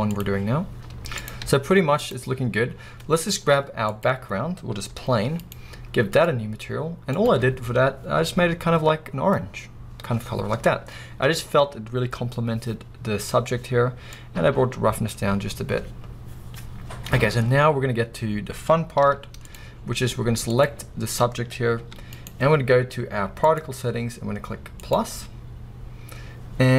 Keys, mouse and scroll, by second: 0.8-1.3 scroll up 2, 1.3 click, 2.3 z, 2.8 scroll down 1, 4.1 click, 4.5 scroll down 1, 5.0 g, 5.6 right click, 6.3-7.5 drag, 14.2-20.6 drag, 19.6 z, 19.8-20.3 scroll up 2, 21.8 g, 25.0-26.7 drag.